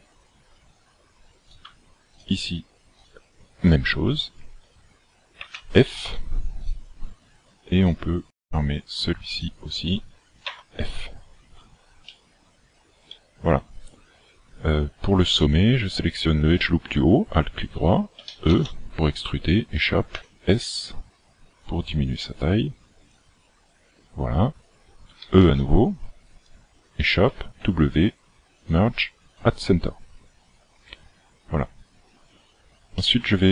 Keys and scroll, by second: 5.5 f, 10.8 f, 18.3 e, 20.2 s, 25.2 e, 27.3 w.